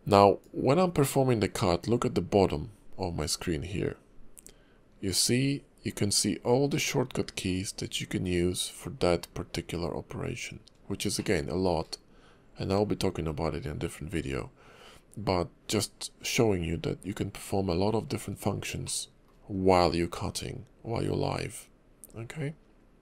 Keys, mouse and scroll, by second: 0.4 click, 11.1 shift+middle click, 18.8 shift+middle click.